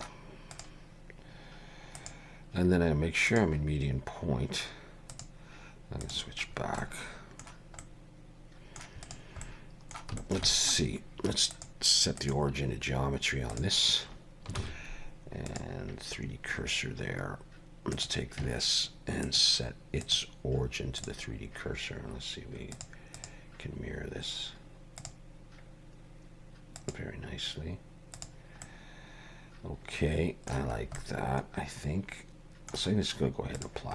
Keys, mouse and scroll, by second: 0.5 click, 2.0 click, 5.1 click, 6.5-6.8 scroll down 3, 6.8 middle click, 7.8 middle click, 9.1 click, 9.5 middle click, 10.2 shift+middle click, 10.5 middle click, 11.5 click, 14.6 shift+s, 16.3-17.7 scroll up 1, 18.0 click, 19.3 click, 22.8 click, 23.2 click, 26.8 click, 28.2 click, 28.7 middle click, 30.8-31.1 scroll up 2, 31.0 middle click, 33.6 click.